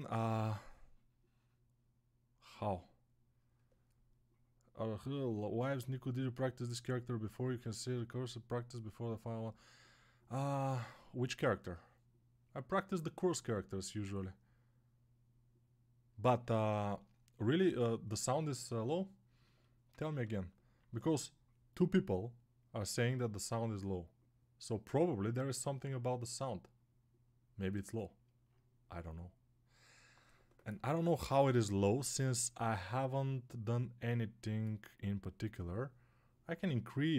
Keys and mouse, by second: 17.5-19.3 right drag, 19.3-37.1 alt+drag.